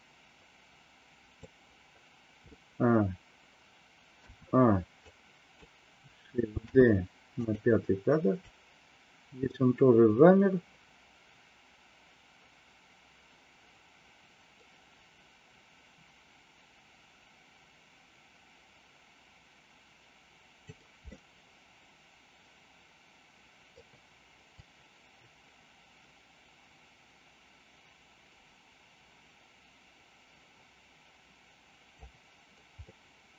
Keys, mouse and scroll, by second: 4.1 a, 5.0 click, 6.5 shift+d, 8.4-20.8 drag, 21.1-23.7 middle drag, 24.5-32.0 drag, 32.7-33.3 middle drag.